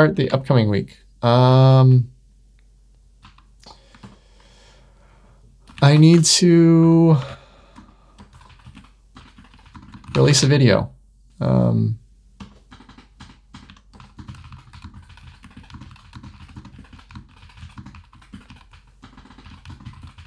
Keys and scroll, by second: 0.1 super+w, 1.5 Down, 3.9 super+Return, 5.6 Right, 6.1 ⟲, 7.1 Right, 12.3 Return, 13.5 Tab.